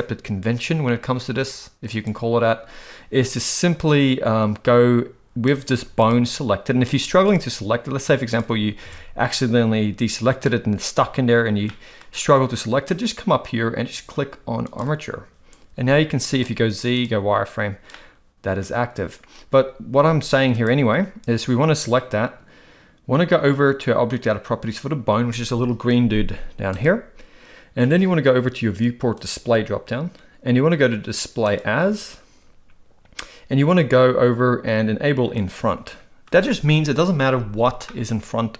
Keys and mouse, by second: 2.0 click, 5.7 z, 7.0 z, 8.9 alt+a, 11.6-12.0 middle drag, 15.8 z, 17.9-18.6 middle drag, 19.9 z, 26.7 click, 29.2 click, 31.5-32.5 drag, 35.4 click, 37.9-38.5 middle drag.